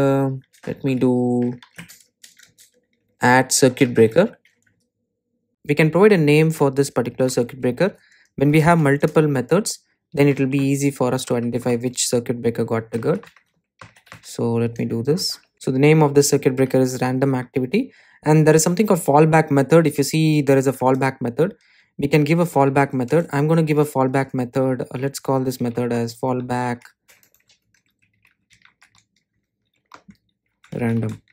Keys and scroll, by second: 1.6 Delete, 4.2 Delete, 5.5 Return, 23.2 Return.